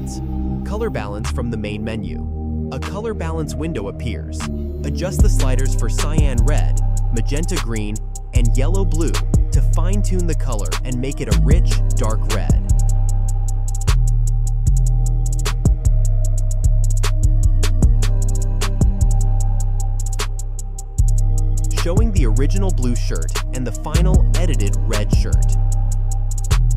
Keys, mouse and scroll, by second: 2.9-5.3 drag, 5.4-13.9 drag, 14.0 click, 14.0-19.4 drag, 19.6-21.1 drag.